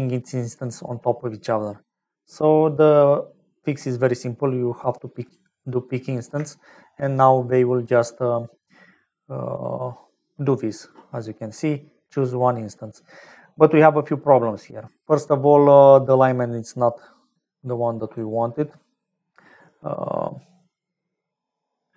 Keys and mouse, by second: 5.1 click, 6.5 shift+middle click, 16.8-18.1 drag.